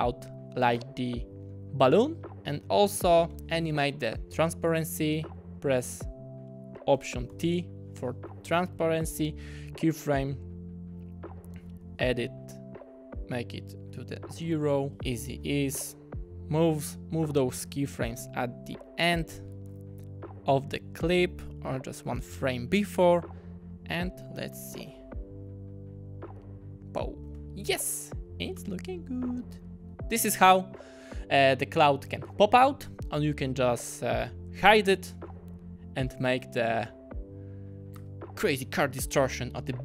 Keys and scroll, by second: 3.3 F9, 7.3 alt+t, 11.8 q, 14.8 0, 14.9 Return, 15.3 F9, 19.6 =, 19.8 =, 22.8 -, 23.0 -, 24.5 space, 27.3 space, 38.0 space.